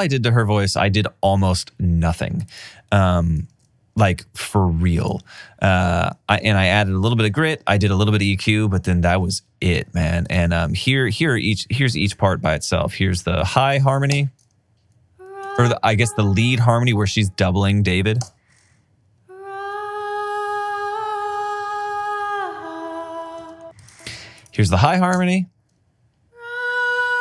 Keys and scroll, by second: 2.0 alt+super+w, 3.8 alt+super+w, 7.8 alt+super+w, 14.5 space, 15.7 space, 18.5 space, 25.4 space.